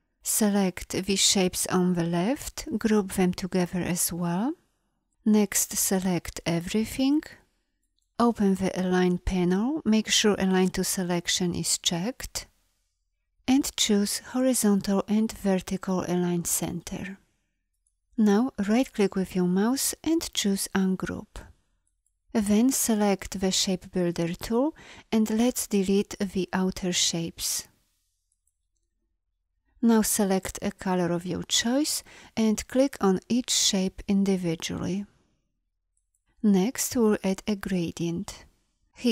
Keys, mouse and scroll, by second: 2.2 click, 2.8 ctrl+g, 22.7 shift+m.